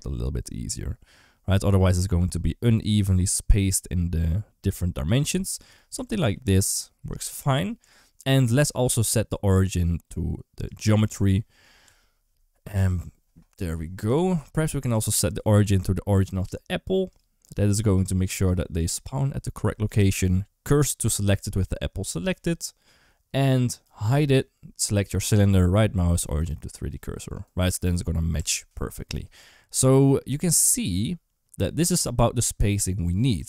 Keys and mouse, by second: 5.8 Tab, 6.1 a, 7.6 Tab, 8.3-10.6 right drag, 11.7 Tab, 12.7 Tab, 16.9 click, 17.5 click, 18.3 click, 18.6 click, 19.8 shift+s, 23.7 click, 24.6 click, 25.1-26.3 right drag, 27.7 Tab, 28.2 Tab, 33.2 Tab.